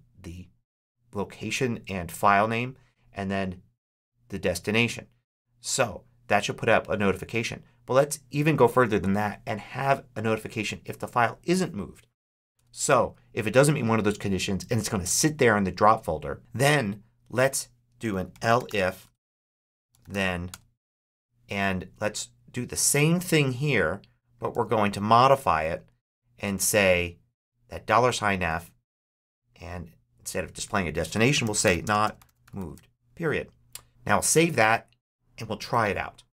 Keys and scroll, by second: 12.4 Return, 12.9 Tab, 17.7-20.5 typing, 18.9 Return, 19.1 Tab, 20.8 Tab, 24.4 super+c, 28.3 super+x, 31.1-32.9 typing, 33.9 super+s, 35.6 super+h.